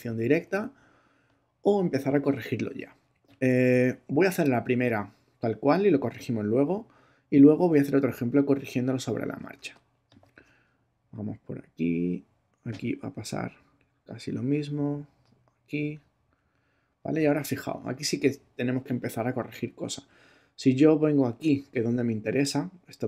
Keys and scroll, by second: 9.6 space.